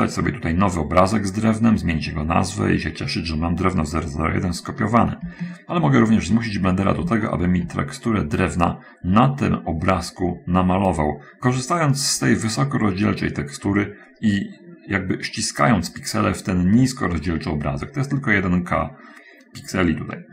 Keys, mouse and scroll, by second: 6.1 shift+middle click, 6.8-7.3 shift+scroll up 1, 7.7 shift+middle click.